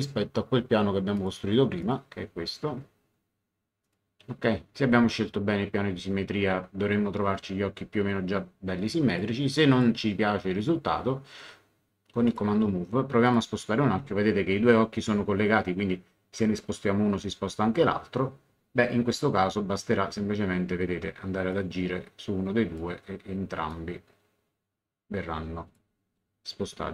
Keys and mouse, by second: 1.1 click, 3.8 click, 9.1 click, 12.2 click, 21.5 click, 23.7 click.